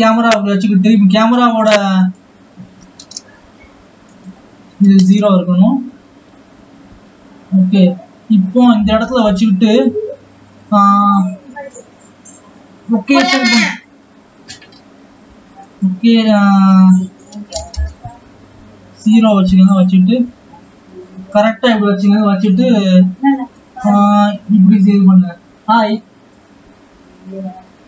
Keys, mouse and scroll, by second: 0.0 scroll up 2, 3.0-26.8 drag.